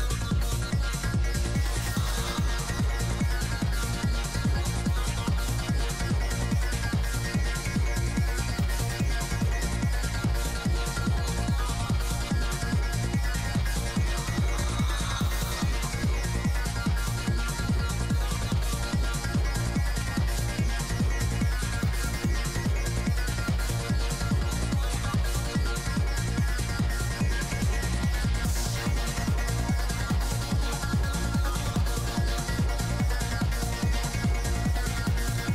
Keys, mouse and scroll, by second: 1.0 ctrl+z, 1.5 g, 1.5 f, 1.8-3.7 middle drag, 3.7-6.7 drag, 3.7 f, 6.8-8.1 middle drag, 7.9 click, 8.6 middle click, 10.0-11.1 drag, 11.5-12.9 middle drag, 12.9 shift+c, 13.0 f, 13.4 click, 13.7 f, 14.3-15.9 drag, 15.9 ctrl+z, 16.1 shift+f, 16.8 click, 17.4 f, 18.2 click, 19.4-21.4 middle drag, 21.4 f, 21.8 click, 23.4 click, 24.4 middle click, 25.0-26.2 drag, 26.2 middle click, 26.7 i, 26.9 f, 27.6 middle click, 27.8 f, 28.1-30.4 drag, 29.9 right click, 30.4 shift+c, 30.5 f, 30.7-31.7 drag, 30.7 right click, 32.1-35.5 drag, 32.1 right click, 34.5-35.5 middle drag.